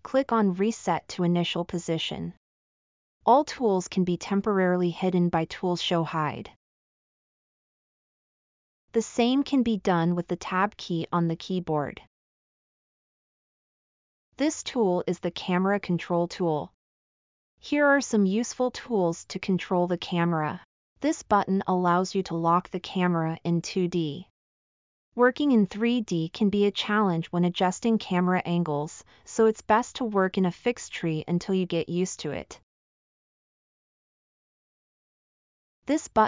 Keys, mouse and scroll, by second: 7.3 Tab, 24.6-25.7 middle drag, 26.7-28.8 middle drag, 29.5 middle drag, 30.3-30.9 middle drag, 31.8 scroll, 32.4 scroll, 33.0-33.8 middle drag.